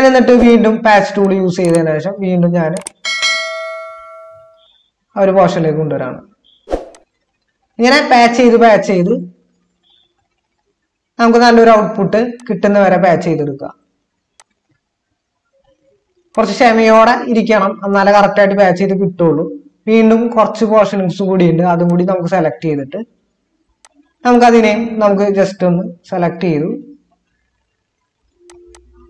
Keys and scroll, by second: 19.4 ctrl+d.